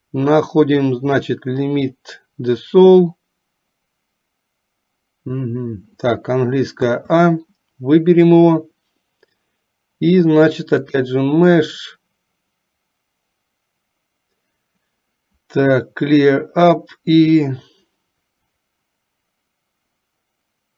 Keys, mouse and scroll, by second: 7.0 a, 11.0-20.7 drag.